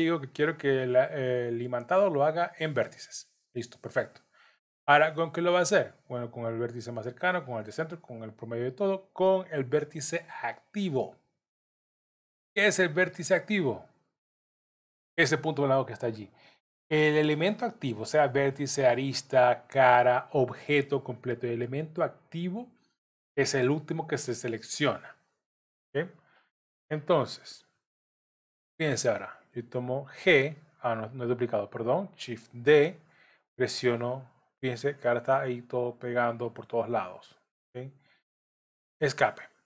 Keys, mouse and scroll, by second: 26.7-27.2 scroll up 2, 30.0 g, 32.6 shift+d.